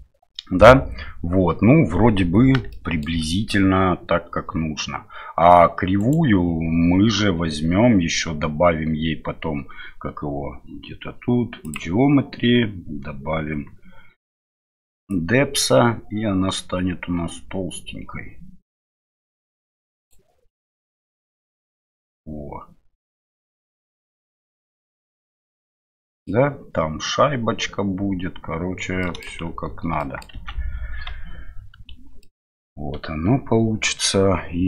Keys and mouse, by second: 2.7-3.0 shift+middle drag, 11.6 click, 15.1-20.1 drag, 24.4-26.2 middle drag, 29.0 middle click, 29.4 shift+z, 30.0 shift+middle click, 30.4 shift+z, 31.7 KP_Divide, 32.2-32.6 middle drag, 32.9 KP_Divide.